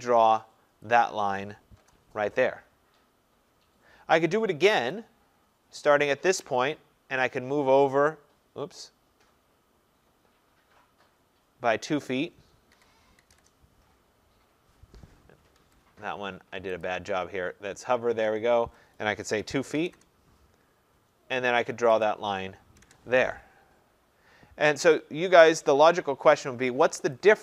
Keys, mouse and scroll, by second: 1.0 click, 1.8 Return, 5.0 click, 12.8-13.4 typing, 15.6 Escape, 16.9 click, 19.4-20.8 typing, 19.9 Return, 22.1 click, 22.9 Return, 27.2 click.